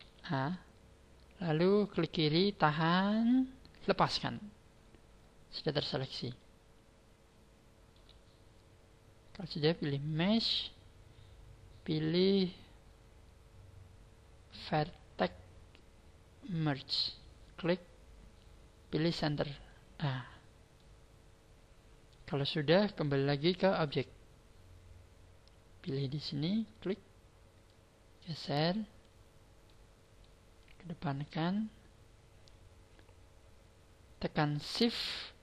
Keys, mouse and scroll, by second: 0.0 b, 4.7-6.4 scroll down 11, 6.4 shift+middle click, 10.1 click, 20.2 scroll down 5, 20.6 middle click, 23.4 click, 26.5 click, 27.6 click, 29.6 middle click, 30.5 click.